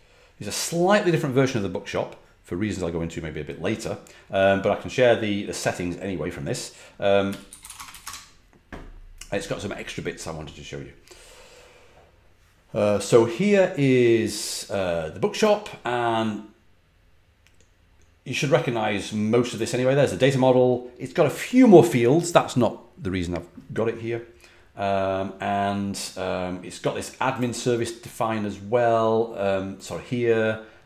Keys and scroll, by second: 0.0-0.1 typing, 7.2-8.4 typing.